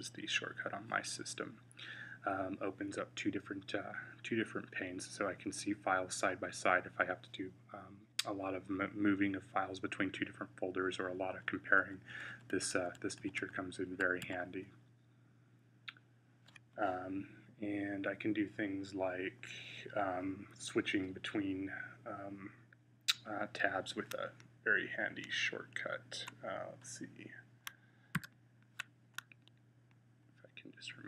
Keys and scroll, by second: 11.6 Down, 12.0 Down, 12.2 Down, 12.4 Down, 12.6 Down, 12.8 Down, 13.0 Down, 13.2 Down, 14.1-17.0 Down, 28.0 u.